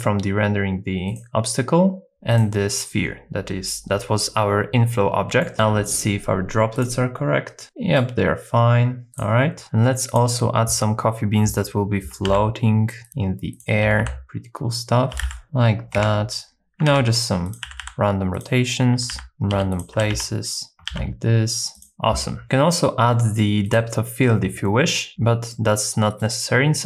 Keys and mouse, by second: 1.1-2.4 drag, 4.9 middle click, 5.5 shift+middle click, 5.8 click, 6.8 click, 7.6 middle click, 9.1 click, 12.3-14.0 typing, 13.6 click, 14.2 middle click, 15.1-17.8 typing, 18.4 click, 18.9-21.9 typing, 19.7 click, 21.8 click, 22.4 middle click, 23.1 middle click, 23.7 click, 25.5 middle click.